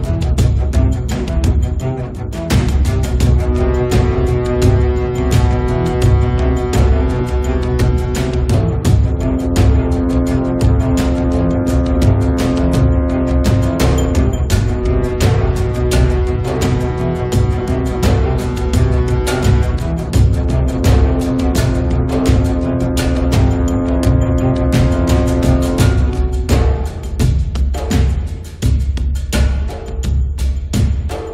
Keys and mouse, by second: 0.3 f, 0.6 middle click, 0.8-1.9 drag, 1.9 middle click, 2.7 right click, 3.1 middle click, 3.9-5.2 drag, 4.1 right click, 5.2 1, 5.4 f, 5.8 click, 6.7 click, 7.2 middle click, 7.8-9.0 drag, 9.0 middle click, 9.2-10.2 drag, 10.2 middle click, 10.4-11.6 drag, 11.6 middle click, 12.3 click, 13.4 click, 13.9-15.6 drag, 13.9 middle click, 13.9 right click, 14.1 f, 15.6 KP_7, 15.8 KP_5, 16.2 KP_5, 17.1-18.1 drag, 17.1 middle click, 17.1 right click, 17.6 middle click, 17.6 right click, 18.4-20.2 drag, 20.3 click, 20.7 right click, 20.9-25.4 drag, 23.1-24.4 middle drag, 24.0 right click, 24.7-28.0 middle drag, 25.8-28.8 drag, 29.0 middle click, 29.1 click, 30.1 click, 30.6 click, 30.8 f, 31.0 click.